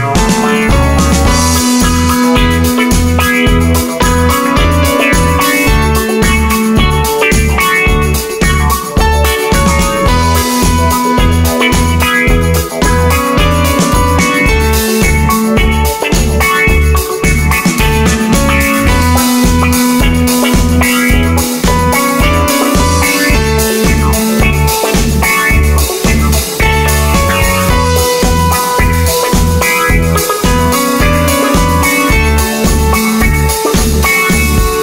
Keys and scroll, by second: 12.0 d, 12.9 d, 19.0 super+z.